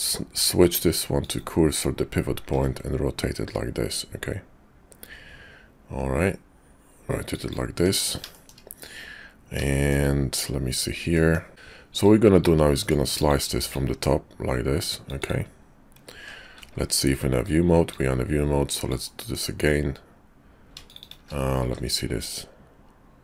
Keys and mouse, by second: 2.3 r, 7.7 Tab, 9.6 shift+click, 11.1 click, 11.5 ctrl+z, 11.5 Tab, 11.9 click, 13.2 click, 13.7-15.3 drag, 16.6 shift+v, 17.9-21.0 drag, 21.6 s.